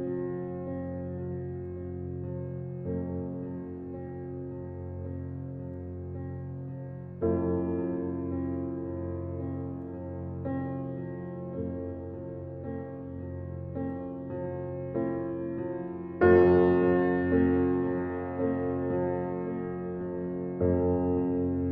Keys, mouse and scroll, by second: 0.1-1.3 middle drag, 1.3 scroll down 3, 1.6-2.8 middle drag, 2.8 ctrl+z, 3.1 ctrl+z, 3.6 ctrl+z, 4.4 shift+d, 6.6 s, 7.5 g, 8.9 g, 10.5 alt+middle click, 11.2 s, 13.4 click, 13.7-14.4 middle drag, 14.4 click, 16.0 click, 16.4 alt+middle drag, 16.8-17.4 scroll up 1, 17.4 shift+click, 18.0 g, 19.4 click, 19.7-20.3 middle drag, 20.3-20.6 scroll down 4, 20.6-21.0 middle drag, 21.0 drag, 21.3 drag.